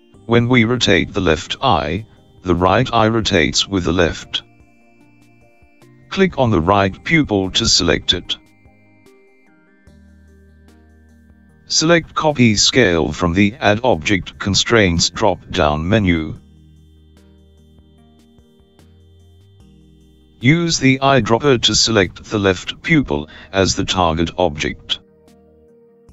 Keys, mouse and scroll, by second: 10.6 click, 14.2 click, 22.6 click.